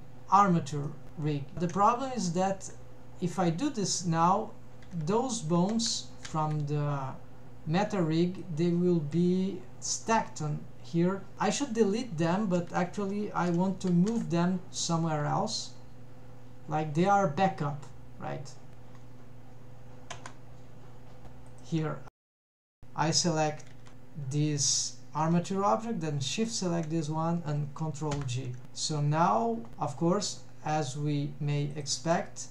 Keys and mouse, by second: 0.9 middle click, 1.9 Tab, 2.7 Tab, 4.0 Tab, 4.9 a, 5.8 alt+a, 6.3 a, 8.6 click, 14.1 m, 20.3 Tab, 21.6 click, 22.7 alt+a, 23.4 click, 26.4 shift+click, 28.4 ctrl+j, 31.8 drag.